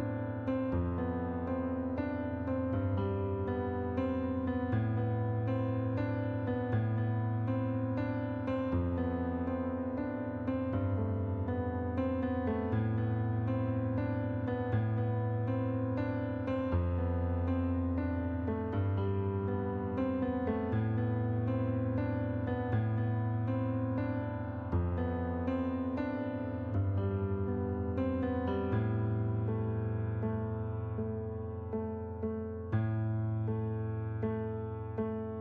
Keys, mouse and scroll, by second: 1.2 click, 2.0 click, 2.9 click, 4.2 click, 4.8 middle click, 5.6 shift+click, 7.9 click, 9.2 click, 11.1 right click, 11.8 click, 13.1 click, 14.1 click, 14.9 click, 15.4 right click, 17.2 click, 17.9 right click, 19.5 middle click, 20.7 click, 21.7 click, 22.1 right click, 23.1 click, 24.0 click, 25.1 click, 26.0 click, 26.3 right click, 27.7 middle click, 28.5 click, 29.9 click, 31.1 shift+click, 32.9 right click, 34.5 click.